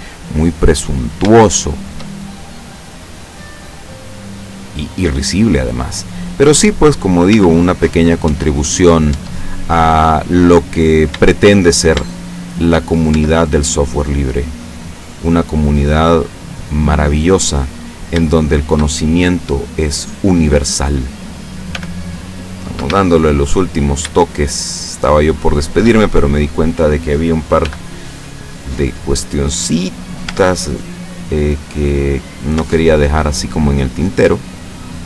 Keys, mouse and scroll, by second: 0.2-1.4 middle drag, 1.9 shift+middle click, 2.5-3.8 middle drag, 4.4 right click, 4.7 middle click, 5.9-7.1 drag, 7.4 Tab, 8.3 Tab, 8.9 middle click, 9.2 Tab, 9.7-10.6 middle drag, 10.8 scroll up 1, 11.4 shift+middle click, 12.2-12.8 shift+middle drag, 13.2 shift+Tab, 14.0 middle click, 15.0 right click, 15.7-17.1 middle drag, 17.1-17.6 scroll up 1, 17.6 middle click, 18.4 shift+middle click, 19.3-20.3 middle drag, 21.8 g, 22.8 Escape, 23.3 middle click, 24.9 shift+right click, 25.7 shift+right click, 26.0-27.1 shift+middle drag, 27.7 g, 29.6 shift+click, 30.3 Tab, 30.7-32.7 shift+middle drag, 32.6 shift+Tab, 33.2 shift+middle click, 34.3 shift+middle click.